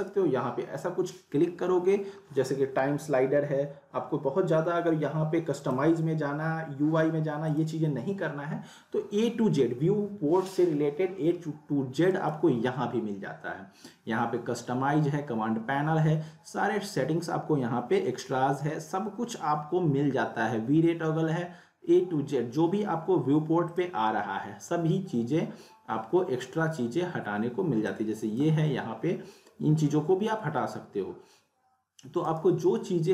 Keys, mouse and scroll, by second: 5.6 click, 7.5 click, 12.1 right click, 23.7 click, 27.9-28.5 drag, 32.2 right click.